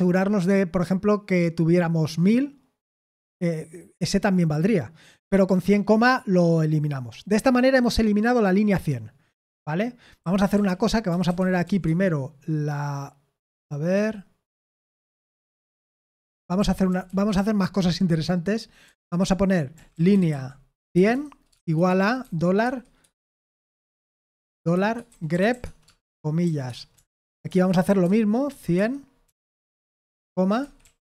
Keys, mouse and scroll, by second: 10.2-12.1 typing, 16.1 Escape, 16.3-16.8 typing, 18.8-31.0 typing.